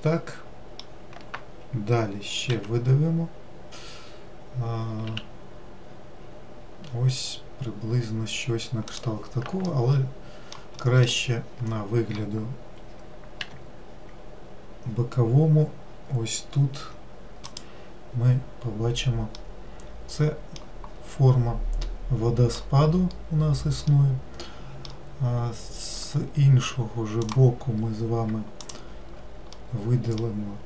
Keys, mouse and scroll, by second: 4.6 e, 9.8 alt+middle click, 11.0 alt+middle click, 13.6 g, 19.5-21.0 middle drag, 21.0-22.0 scroll down 2, 22.0-23.2 middle drag, 23.2-24.0 scroll up 3, 24.0-26.2 middle drag, 26.2-27.4 scroll up 3, 27.4 click, 28.8 shift+click, 29.7-30.6 middle drag.